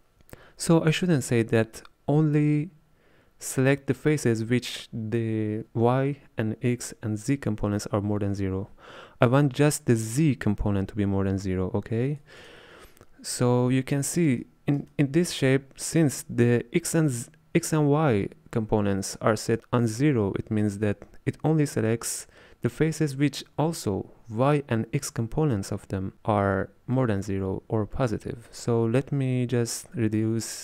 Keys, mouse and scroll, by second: 10.2-12.5 drag, 13.4-18.0 middle drag.